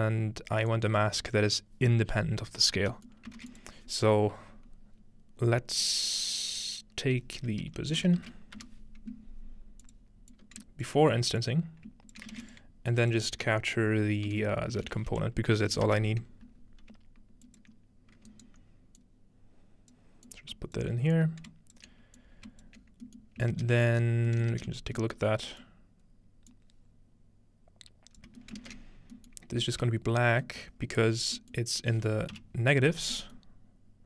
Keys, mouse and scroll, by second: 0.0 ctrl+middle click, 0.3-2.9 scroll up 1, 3.4 shift+a, 3.5-5.0 shift+drag, 7.6-9.1 typing, 9.8 click, 10.3 ctrl+click, 11.4 click, 12.4 typing, 12.5-14.6 shift+drag, 14.3-15.4 typing, 15.7 End, 17.5 ctrl+drag, 19.0-23.6 drag, 22.8-26.5 scroll down 1, 23.2 ctrl+middle click, 24.2 middle click, 24.5 ctrl+middle click, 26.5-28.4 drag, 28.6 ctrl+click, 29.6 z, 30.7-32.4 scroll up 1, 32.4 typing, 32.9-34.0 scroll down 1.